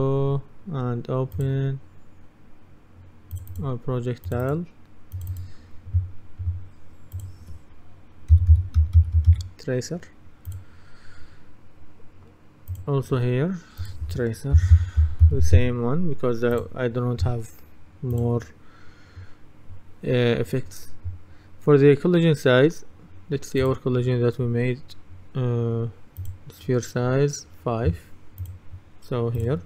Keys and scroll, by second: 8.2-9.8 typing, 14.4-16.1 typing.